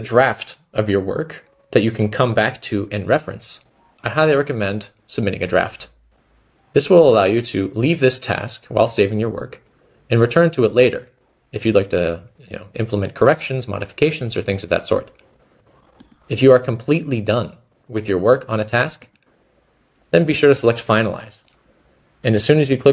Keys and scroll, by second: 22.0-22.9 typing.